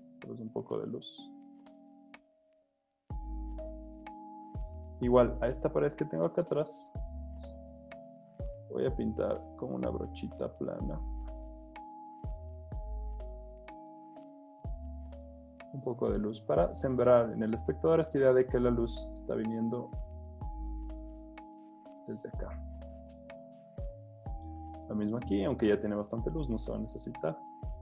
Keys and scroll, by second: 0.8 super+z, 1.3 alt+super+z, 3.5 super+z, 7.9 super+z.